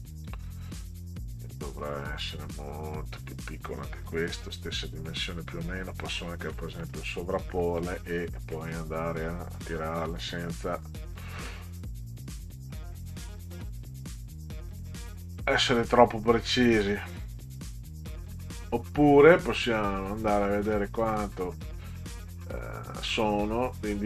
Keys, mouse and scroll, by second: 1.1 click, 2.3-5.8 drag, 6.5 middle click, 7.6 middle click, 8.5 middle click, 10.2 click, 11.2 middle click, 14.8 click, 16.8-18.4 drag, 20.0 click.